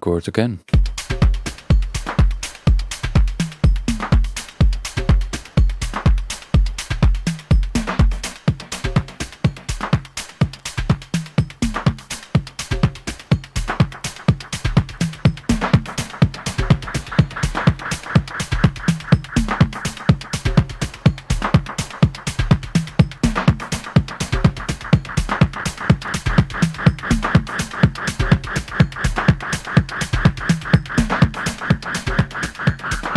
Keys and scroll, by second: 0.7 F9.